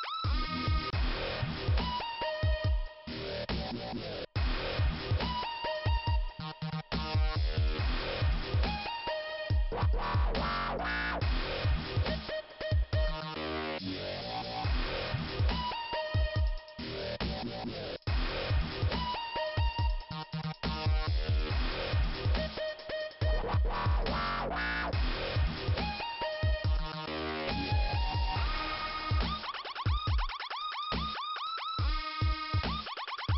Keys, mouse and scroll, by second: 1.6 click, 1.7 click, 4.2 click, 6.1 click, 7.0 click, 7.7 click, 9.8 click, 11.7 click, 12.6 click, 14.3 click, 15.2 click, 17.4 click, 20.3 click, 20.7 click, 22.3 click, 24.4 click, 25.3 click, 27.4 click, 28.3 click, 29.4 click, 30.1 Delete.